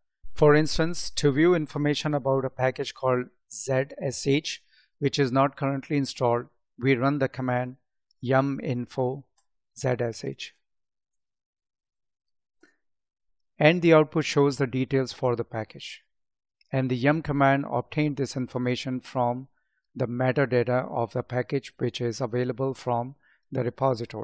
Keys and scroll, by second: 10.0 space, 10.9 space.